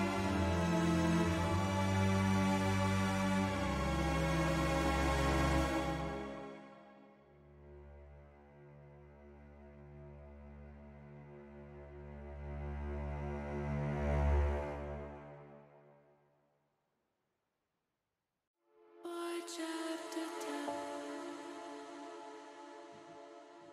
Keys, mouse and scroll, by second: 2.7 middle click, 4.6 KP_0, 8.8 click, 14.0 click, 16.3 click, 18.7 click, 20.9 shift+a.